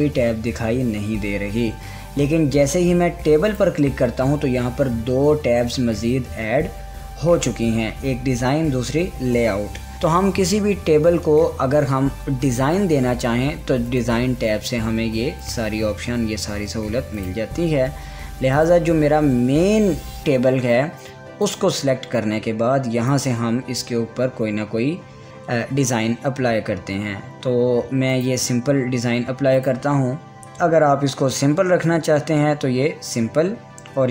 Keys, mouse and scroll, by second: 4.1 click, 7.5 scroll up 1, 14.4 click, 14.5 click, 22.0 click, 28.7 click.